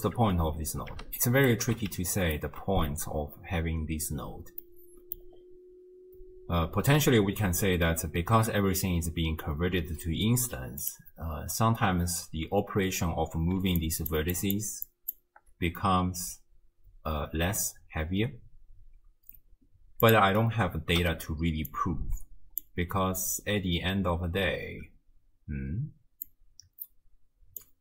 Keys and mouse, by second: 0.2 m, 1.4 ctrl+alt+click, 2.1 ctrl+click, 4.6 click, 10.8 click, 13.6-15.4 d, 13.8 click, 14.4 click, 14.9 click, 16.1 d, 20.1 click, 21.0 m, 21.7-22.6 drag, 26.3-27.6 drag.